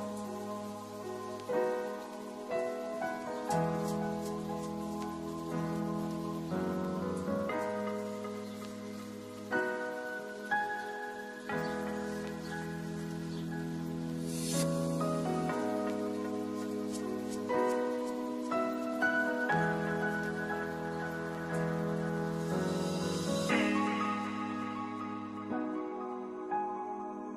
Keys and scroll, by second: 0.2 v, 1.2 ctrl+shift+z, 1.7 ctrl+z, 5.2 ctrl+z, 11.2 ctrl+z, 20.0 ctrl+s, 26.5 ctrl+s.